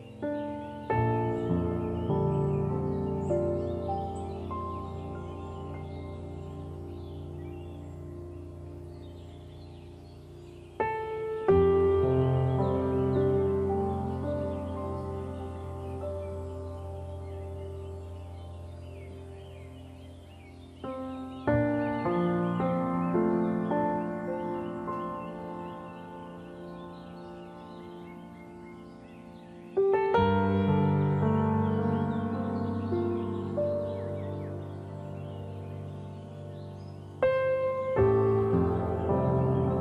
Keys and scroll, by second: 23.8 ctrl+z.